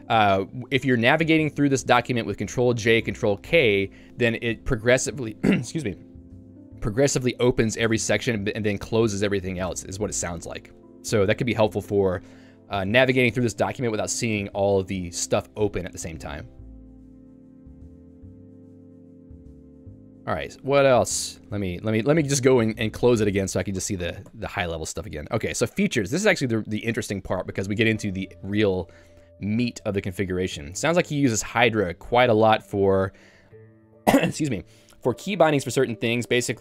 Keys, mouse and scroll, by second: 5.7-8.0 typing, 9.8 Tab, 10.7 j, 11.5 k, 11.9 j, 13.5 ctrl+d, 13.7 ctrl+d, 14.3 ctrl+u, 17.9 shift+Tab, 18.1 shift+Tab, 18.8 ctrl+d, 19.1 ctrl+d, 21.4 shift+Tab, 22.1 shift+Tab, 22.8 k, 23.9 ctrl+u, 24.1 ctrl+u, 25.3 j, 30.6 k, 32.4 j.